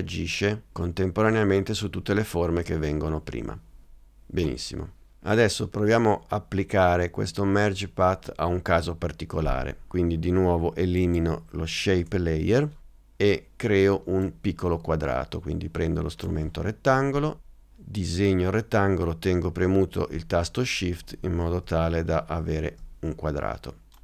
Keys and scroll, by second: 12.1 BackSpace.